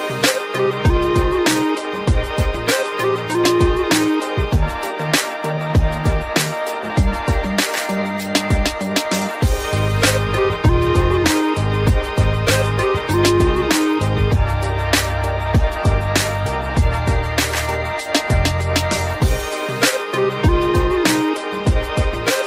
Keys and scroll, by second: 1.4 ctrl+g, 2.2 ctrl+alt+shift+e, 20.3 ctrl+alt+z.